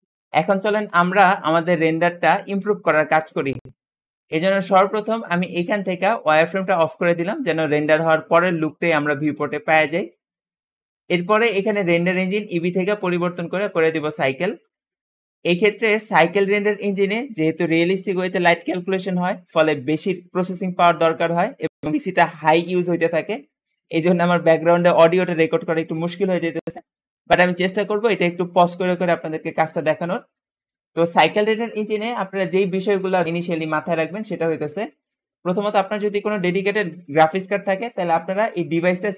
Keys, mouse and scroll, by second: 5.1-8.1 drag, 12.0-15.0 drag, 38.6-39.1 drag.